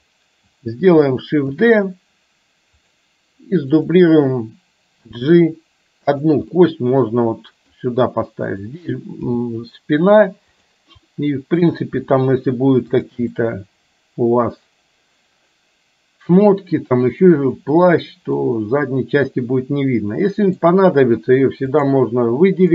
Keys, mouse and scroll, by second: 1.5 shift+d, 3.8 click, 5.2 g, 6.7-7.7 middle drag, 8.5 click, 9.4 g, 11.7 click, 12.3 g, 13.4-17.3 middle drag, 18.4-20.7 middle drag, 21.7 click.